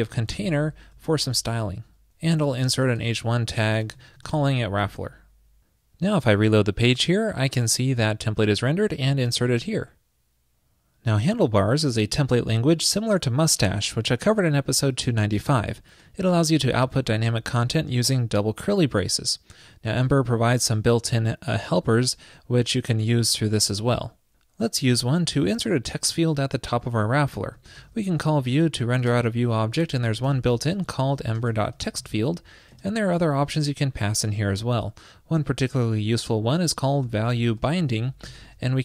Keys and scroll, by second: 3.1 ctrl+shift+<, 4.9 super+s.